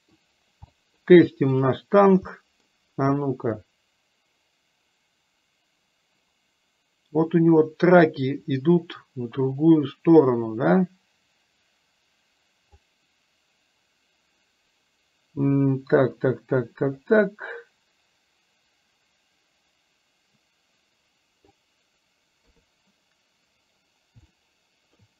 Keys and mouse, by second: 0.8 middle click, 1.5-1.9 drag, 2.4 middle click, 3.6-12.9 drag, 17.1-21.5 middle drag, 22.5 KP_3, 24.4-25.0 middle drag.